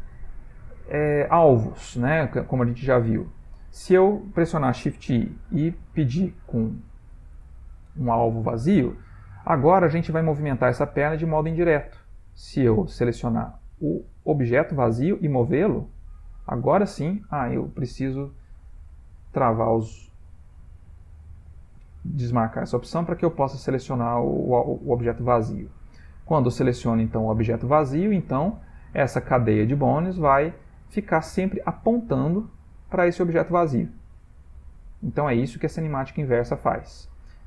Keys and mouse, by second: 0.1 alt+r, 1.4 shift+middle click, 2.1 ctrl+middle click, 2.7 shift+middle click, 5.1 shift+i, 8.7 ctrl+middle click, 8.9 ctrl+middle click, 10.8 click, 11.4 ctrl+middle click, 11.5 ctrl+middle click, 12.5 ctrl+middle click, 13.2 click, 13.7 g, 14.7 click, 15.2 g, 15.8 click, 16.8 click, 17.7 click, 20.5 click, 21.3 g, 31.2 click, 32.4 click, 32.9 click, 34.1 click, 34.5 g.